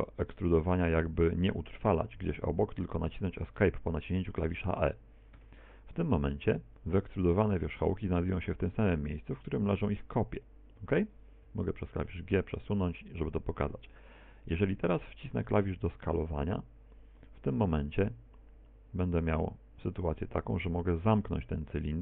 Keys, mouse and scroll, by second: 6.6 middle click, 10.1 g, 11.5 g, 15.9 e, 18.4 s.